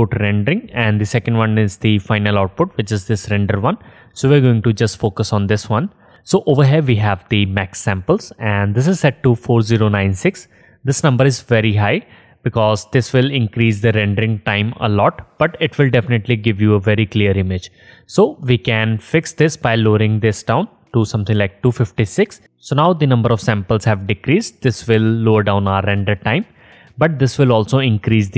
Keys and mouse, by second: 6.1-22.0 drag, 23.3-28.3 drag.